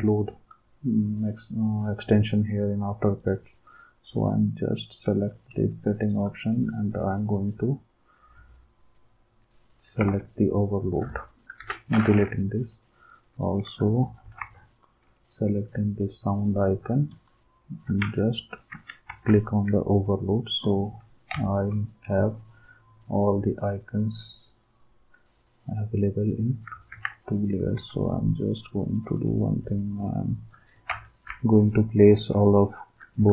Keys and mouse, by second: 10.0 alt+Tab, 11.6 Delete, 14.2 ctrl+g, 18.0 alt+Tab, 21.4 shift+click, 26.9 ctrl+s, 31.2 Right, 31.7-32.9 Right, 33.2 Right, 33.2 Down.